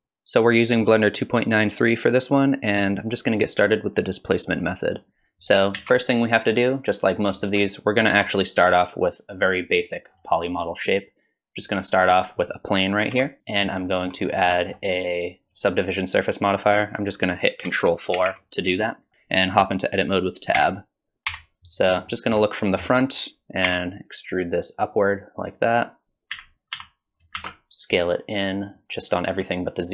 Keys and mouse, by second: 5.7 shift+a, 8.1 shift+a, 13.1 KP_1, 13.4 click, 13.9 shift+middle click, 14.5 middle click, 18.1 ctrl+4, 20.6 Tab, 21.3 KP_1, 22.1 shift+click, 23.6 e, 26.3 a, 26.8 s.